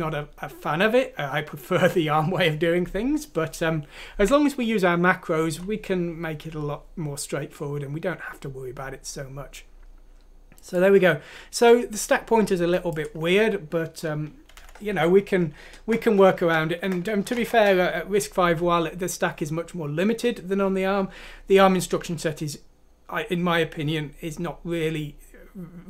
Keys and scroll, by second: 14.5 Home, 15.5 typing, 16.7-17.4 typing.